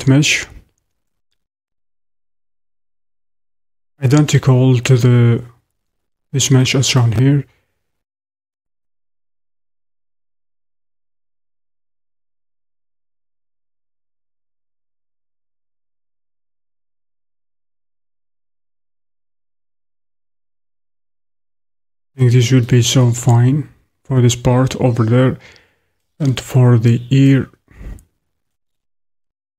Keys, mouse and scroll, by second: 2.9-7.3 drag, 22.9-27.4 drag, 28.8-29.5 drag.